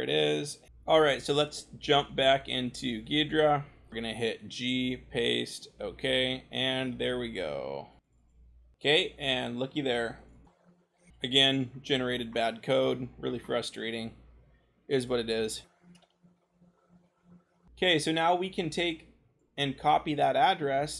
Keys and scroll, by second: 0.7 scroll, 3.9 ctrl+c, 4.3 g, 4.8 ctrl+v, 11.1-11.9 scroll, 15.2 c, 15.9-16.4 scroll.